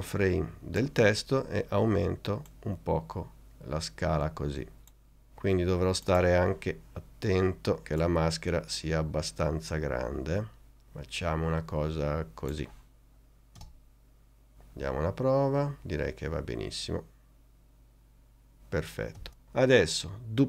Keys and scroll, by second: 13.7 space, 19.3 space.